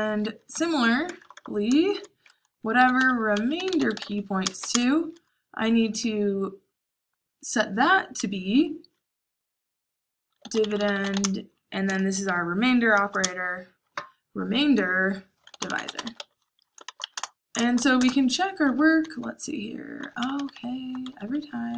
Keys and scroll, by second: 0.0-5.0 typing, 6.6 typing, 10.1-11.6 typing, 12.9-13.6 typing, 15.2-17.1 typing, 18.4-21.7 typing.